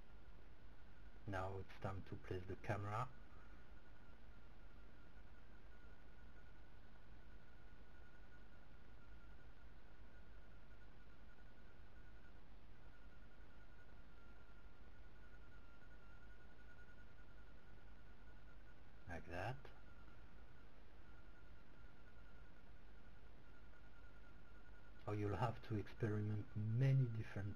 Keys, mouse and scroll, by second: 8.3-10.6 ctrl+right drag, 9.7 ctrl+g, 14.9 r, 18.5-20.7 drag, 19.6 g, 26.0 click, 26.7 r.